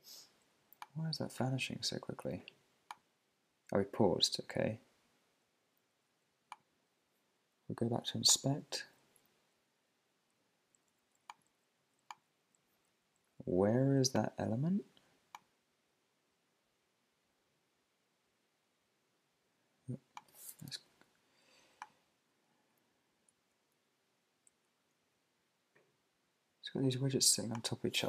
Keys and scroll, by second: 22.7 Up, 23.3 Right, 23.8 Down, 24.5 Right, 25.0 Down.